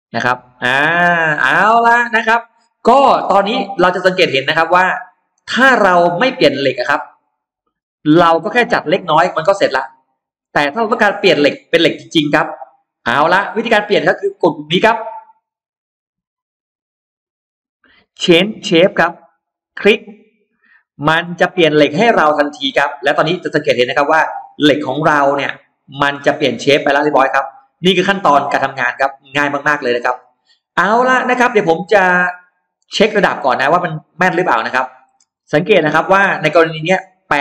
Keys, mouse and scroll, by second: 1.5 scroll down 2, 2.0 middle click, 2.4-2.8 scroll down 2, 2.8-3.8 scroll up 2, 4.0-5.2 middle drag, 5.3-5.6 scroll down 1, 5.8-6.6 scroll up 2, 6.6 middle click, 7.4-7.8 scroll down 2, 7.9-10.3 middle drag, 10.3-11.4 scroll down 2, 12.0 scroll down 1, 12.1-13.9 middle drag, 15.6 click, 19.4 click, 21.4-23.4 scroll up 4, 23.0 middle click, 24.0-24.3 scroll down 2, 25.2 click, 25.8 middle click, 26.0 scroll down 2, 29.6 scroll down 2, 30.1-31.4 middle drag, 31.5 scroll down 2, 32.0 scroll up 2, 33.4 click, 33.9-34.6 scroll down 2, 34.6 middle click, 35.0-35.3 scroll down 2, 35.3 space, 35.4-36.7 scroll up 2, 36.8-37.4 middle drag.